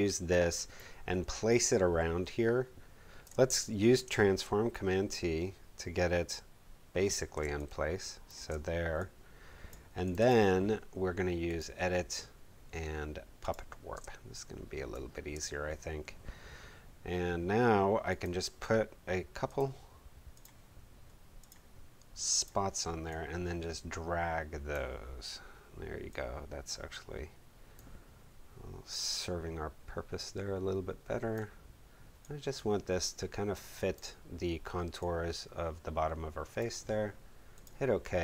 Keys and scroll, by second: 3.0 space, 3.5 super+space, 3.7 super+t, 4.4 alt+super+t, 7.4 alt+shift+space, 8.2 shift+space, 13.9 space.